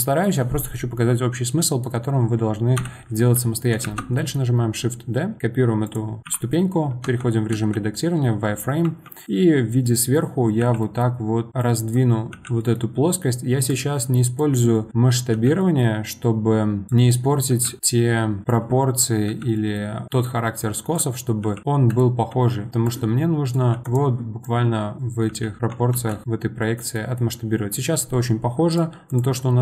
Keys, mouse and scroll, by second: 2.1-2.8 scroll up 1, 2.8 KP_1, 3.8 shift+d, 7.0 Tab, 7.5 z, 8.8 1, 9.2 click, 10.6 g, 11.6 click, 12.3 g, 14.4 click, 15.3 g, 16.9 click, 17.5 g, 18.5 click, 19.3 g, 20.6 click, 21.4 g, 22.8 click, 23.7 g, 24.4 click, 25.3 g, 25.6 Tab, 25.9 z, 26.2-28.7 middle drag, 28.7 click, 29.1 click.